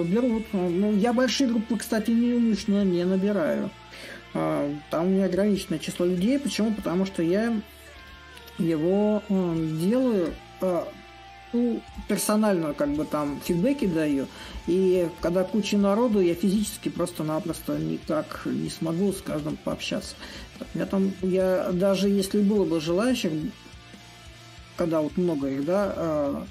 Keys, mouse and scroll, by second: 0.0-4.8 drag, 4.8 s, 6.5-7.6 drag, 10.0-15.0 drag, 16.2-21.2 drag, 21.5-26.5 drag.